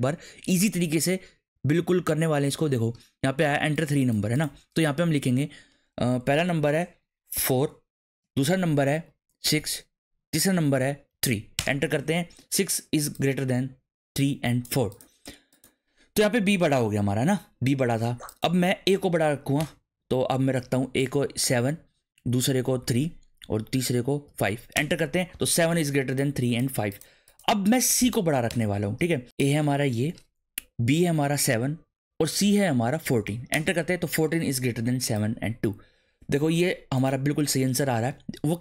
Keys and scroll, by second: 7.3 4, 8.2 space, 9.4 6, 10.3 space, 11.1 3, 11.5 Return, 19.0 Up, 19.6 Return, 20.9 7, 21.7 space, 23.0 3, 23.4 space, 24.4 5, 24.7 Return, 28.0 Up, 28.5 Return, 29.5 2, 30.0 space, 31.3 7, 32.1 space, 32.7 1, 33.0 4, 33.5 Return.